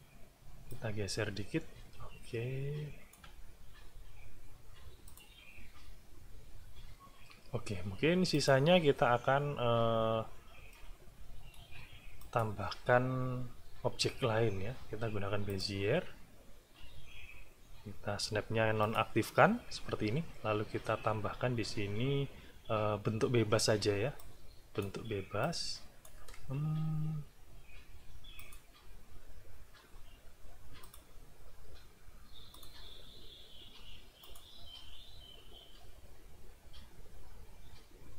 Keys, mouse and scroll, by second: 0.7-3.3 alt+drag, 5.0 click, 8.3 click, 10.7-11.7 middle drag, 12.2 click, 15.5 click, 18.8 click, 24.2 click, 25.4 click, 28.4 click, 30.8 click, 32.5 click, 34.2 click.